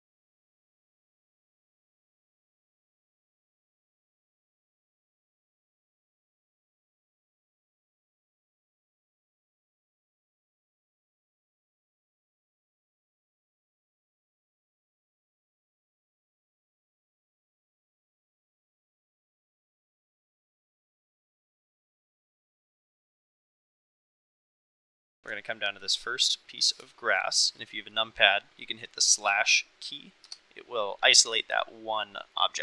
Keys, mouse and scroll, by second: 0.2 shift+middle click, 0.4 middle click, 0.5 Tab, 0.7 middle click, 1.1 Tab, 1.5 KP_Divide, 1.7 click, 2.3 click, 2.9-7.4 typing, 3.3 ctrl+click, 3.7 Escape, 3.8 click, 4.0 Escape, 4.7 Escape, 5.8 ctrl+click, 6.4 Escape, 6.5 ctrl+z, 6.7 ctrl+z, 6.8 ctrl+z, 6.8 click, 7.2 Escape, 7.5 Escape, 7.9 Escape, 8.3 Tab, 8.8 shift+middle click, 8.9 middle click, 9.1 shift+middle click, 9.3 middle click, 9.9 Tab, 11.0 g, 11.2 ctrl+click, 11.5 g, 11.6 Escape, 11.8 g, 11.9 Escape, 12.2 g, 12.3 Escape, 12.6 Escape, 12.7 Escape, 12.9 Tab, 13.1 Tab, 13.2 click, 13.8 g, 14.2 click, 14.3 g, 14.5 Escape, 14.7 g, 14.8 Escape, 15.1 g, 15.2 Escape, 15.3 click, 15.6 Escape, 15.8 Tab, 16.0 Tab, 16.1 shift+click, 17.1 g, 17.8 g, 17.9 Escape, 18.1 g, 18.3 Escape, 18.6 Escape, 18.9 g, 19.0 Escape, 19.1 click, 19.3 Tab, 20.7 shift+middle click, 20.9-21.2 middle drag, 23.9-24.2 middle drag, 25.3-25.7 shift+middle drag, 26.3-26.6 middle drag, 26.9 shift+middle drag, 27.3 middle click, 32.3-32.6 middle drag.